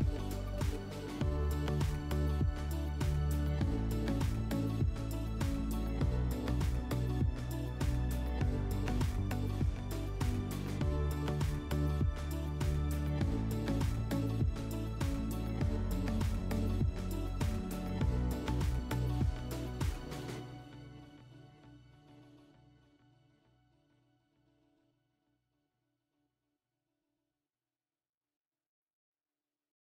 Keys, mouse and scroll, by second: 0.6 click, 2.1 alt+w, 3.0 middle click, 4.5 alt+middle click, 5.7-7.3 middle drag, 9.9-11.6 drag, 14.6 click, 14.8 click, 15.5-16.3 typing, 17.2 Tab, 17.7-18.2 typing, 19.2 Return, 24.3-25.9 drag, 26.1-27.7 drag, 27.9-29.5 drag.